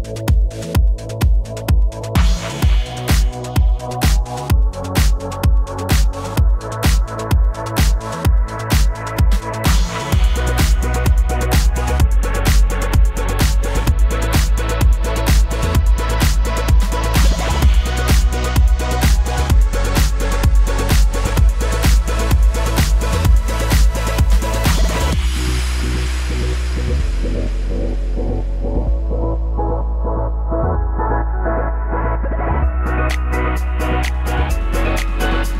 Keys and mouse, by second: 3.2 d, 3.4 d, 4.1 d, 7.7-8.1 d, 9.1 d, 10.6 d, 10.9 d, 15.1-25.6 shift+drag, 22.8 shift+right click, 26.6 Tab, 26.9 1, 27.0-35.5 shift+right drag, 27.4 g, 28.0 g, 30.4-35.5 typing, 31.9 click, 33.6 click.